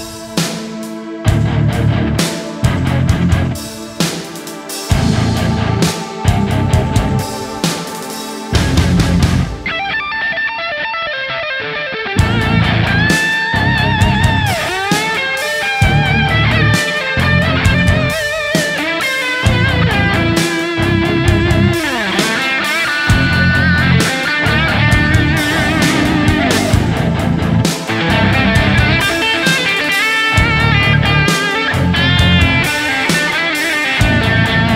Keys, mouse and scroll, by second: 2.5 double click, 2.9 s, 3.1 double click, 3.7 s, 4.0 double click, 4.3 s, 9.3 shift+click, 17.0 right click, 19.4 alt+right click, 22.8 alt+right click.